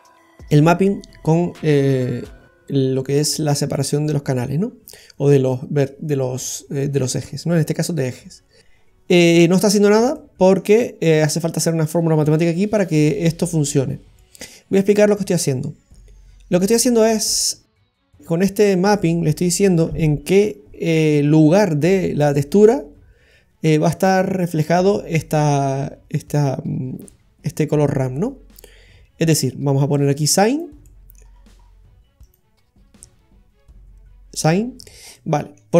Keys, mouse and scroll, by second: 2.8-3.6 scroll up 5, 3.4 middle click, 8.7-9.6 scroll down 5, 10.1 middle click, 13.8-14.5 scroll down 2, 14.2 middle click, 17.7 click, 29.7 click, 30.5 click, 30.8 middle click, 31.4-31.8 scroll up 7, 32.2 click, 35.1 middle click.